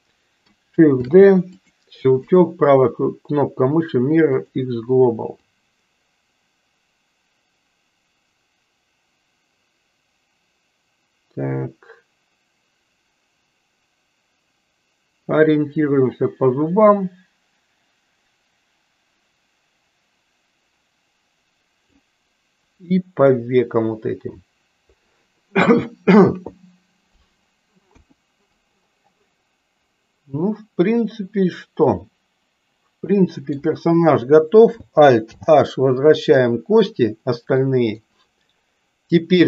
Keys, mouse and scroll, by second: 1.1 shift+d, 3.8-5.5 right drag, 5.5-21.8 drag, 22.8 middle click, 28.0 KP_1, 29.9-33.7 middle drag, 35.3 alt+h, 37.7 middle click.